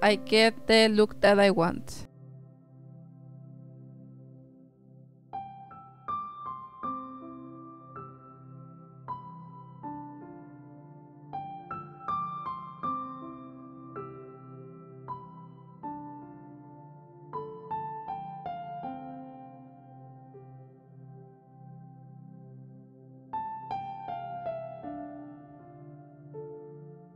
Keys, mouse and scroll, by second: 0.1-0.7 drag, 3.1 click, 6.0 click, 8.0 middle drag, 8.1 click, 8.9 shift+d, 10.3 click, 11.1 shift+a, 12.3 click, 13.1-13.6 drag, 15.7 click, 17.8-19.4 drag, 23.7 click, 26.7-27.1 drag.